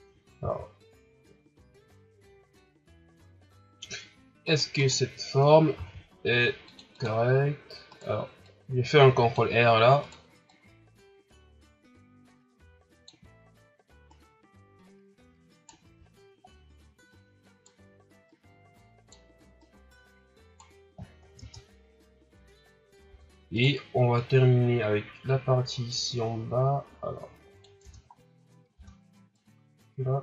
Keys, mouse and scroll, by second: 0.4 ctrl+r, 4.8 right click, 5.7 ctrl+r, 7.9 right click, 8.4-10.0 drag, 10.0 right click, 10.5-13.3 drag, 13.3-14.1 shift+scroll up 2, 14.1 right click, 16.1 shift+scroll down 1, 17.1-18.7 right drag, 19.6-20.9 right drag, 20.9 scroll down 3, 21.4 Tab, 22.3-23.1 scroll up 2, 23.1 Tab, 23.5 right click, 24.2-27.2 drag, 27.8 Tab, 28.1 scroll down 2, 28.5 scroll up 2, 28.7 Tab, 29.3-30.2 drag.